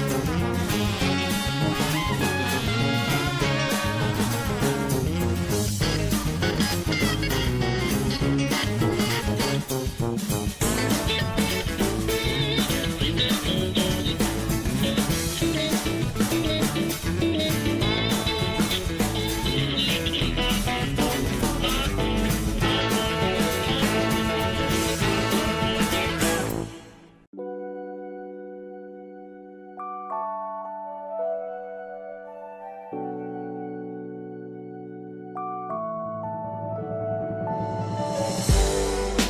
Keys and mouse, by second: 0.1 click, 1.2-2.4 drag, 3.7 shift+middle click, 4.9 click, 5.4-6.9 drag, 7.4 shift+middle click, 7.8 middle click, 8.4 shift+middle click, 8.9 shift+middle click, 9.5 shift+middle click, 11.5 shift+middle click, 12.1 shift+middle click, 13.3 shift+middle click, 15.1 m, 16.9 shift+middle click, 18.0 2, 18.6 click, 20.6 f, 21.1 middle click, 21.9 click, 22.4 middle click, 22.8 middle click, 23.3 shift+f, 23.3 middle click, 23.6 middle click, 24.2 shift+f, 24.3 middle click, 25.5-26.8 typing, 27.8 shift+middle click, 28.3 1, 28.9 Tab, 29.5 shift+middle click, 30.0 middle click, 30.5 ctrl+s, 35.8 shift+middle click, 36.0 Tab, 36.7 shift+middle click, 37.6 shift+middle click, 38.4 shift+middle click.